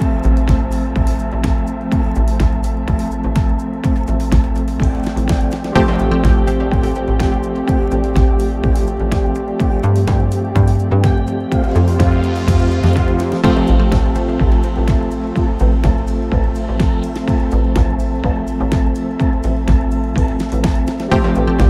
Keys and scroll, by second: 2.1 ], 5.0 ], 16.3 Delete.